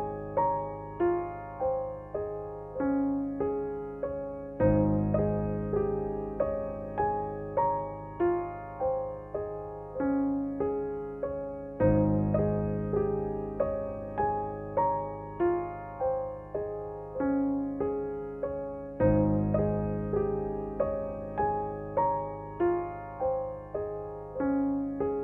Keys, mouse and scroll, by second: 0.1 space, 0.3 click, 3.2 ctrl+z, 3.7 space, 3.9 click, 4.2 space, 5.1 space, 5.5-7.6 drag, 7.6 ctrl+z, 8.0 click, 8.8 ctrl+z, 9.1-11.3 drag, 11.2 space, 12.6-14.6 drag, 14.6 space, 14.8 click, 15.1 space, 15.6 ctrl+d, 16.0 space, 16.2 click, 16.6 space, 18.8 ctrl+=, 19.4 space, 19.5 click, 19.9 space, 20.4 ctrl+=, 22.2 click.